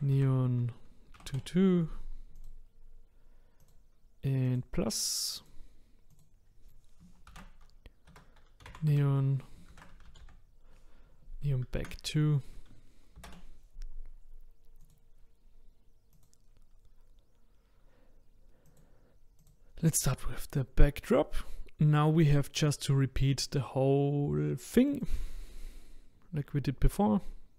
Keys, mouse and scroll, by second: 3.6 typing, 4.6-14.9 drag, 16.3 click, 18.6 click, 19.4 click.